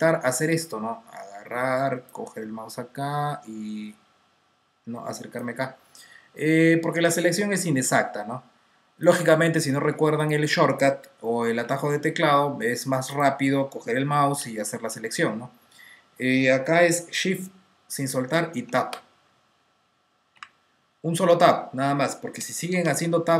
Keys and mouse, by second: 0.0 click, 8.9 click, 11.0 click, 11.5-12.5 typing, 13.1 click, 13.5-15.5 typing, 16.8-18.5 typing, 18.5 Tab, 20.2 typing, 22.3-23.1 typing.